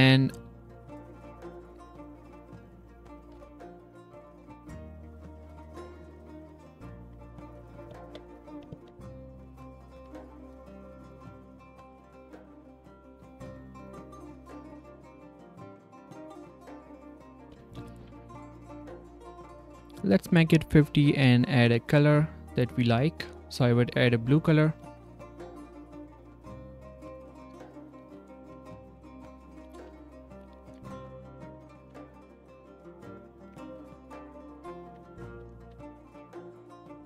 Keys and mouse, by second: 0.4 g, 2.0 g, 3.2 r, 5.1 g, 5.7 r, 7.0 r, 9.9 g, 14.4 s, 16.6-17.9 drag, 27.1 z, 27.5 click, 28.0 s, 28.0 drag, 30.0 drag, 30.4 Tab, 30.7 a, 31.0 g, 32.2 g, 33.4 Tab, 33.6 click, 34.1 ctrl+click, 35.6 z.